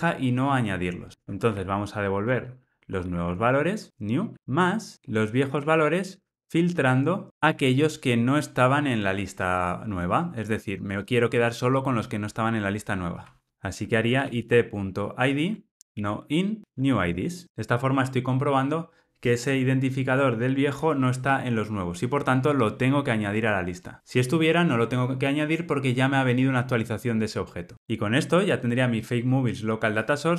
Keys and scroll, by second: 2.4 Return, 13.5 Return.